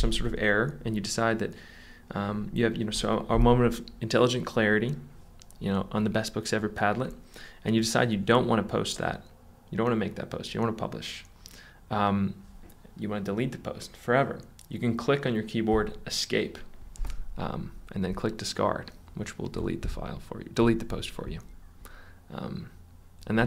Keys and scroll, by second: 15.8 ↻.